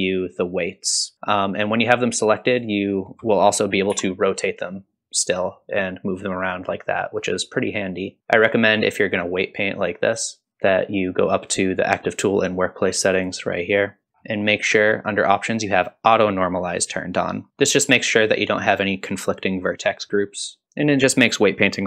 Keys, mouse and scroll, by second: 1.6 ctrl+click, 2.6 ctrl+click, 3.9 r, 8.0 scroll up 1, 13.2 click, 14.1-15.2 scroll down 1, 15.2-17.5 scroll down 2, 17.7 middle click, 20.6 middle click.